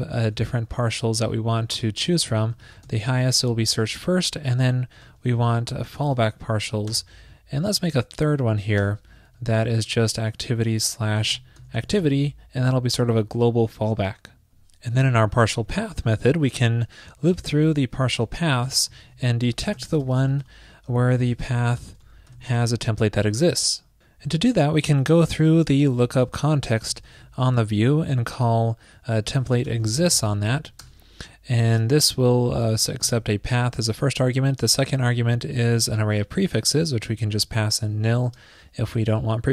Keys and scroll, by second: 0.3 super+v, 2.8 shift+super+Right, 2.8 super+c, 5.4 super+v, 5.9 alt+shift+Left, 6.1 alt+shift+Left, 7.8 super+Right, 8.2 ctrl+shift+d, 9.8 alt+shift+Left, 10.2 alt+shift+Left.